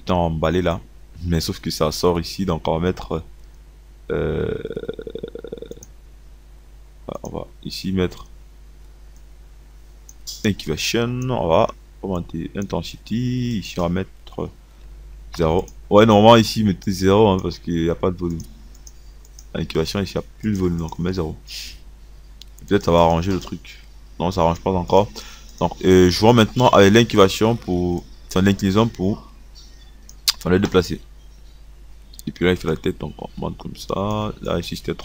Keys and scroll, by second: 15.5 KP_0.